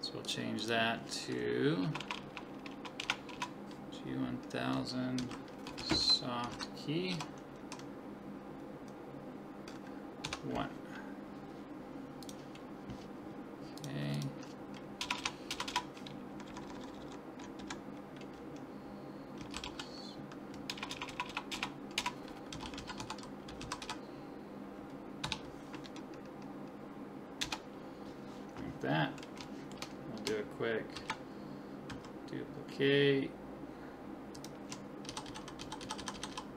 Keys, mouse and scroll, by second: 0.2-1.9 drag, 2.0-3.3 typing, 13.8-15.2 drag, 15.2 BackSpace, 15.7 BackSpace, 16.6 Left, 16.7 Left, 17.0 Left, 20.9 BackSpace, 21.3 BackSpace, 29.5 middle click, 29.7-31.3 drag, 31.0 shift+d, 35.1-36.5 typing.